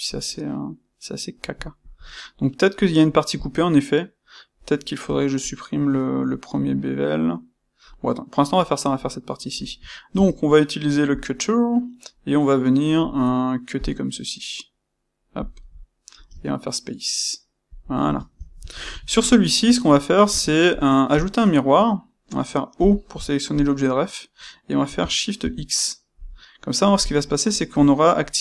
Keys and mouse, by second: 3.3 click, 10.1 space, 13.8 space, 20.2-23.5 shift+middle drag, 23.5-26.2 drag, 26.2-28.4 middle drag.